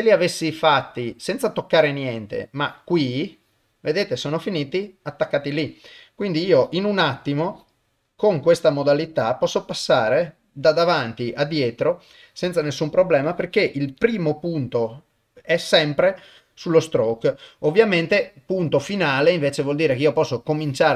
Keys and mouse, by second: 1.6 click, 2.5 click, 3.3 click, 3.8-5.4 middle drag, 6.4 click, 7.4 click, 8.4 click, 9.3 click, 9.9-13.9 middle drag, 13.9-18.8 drag, 18.9-20.5 middle drag, 20.5-20.9 drag.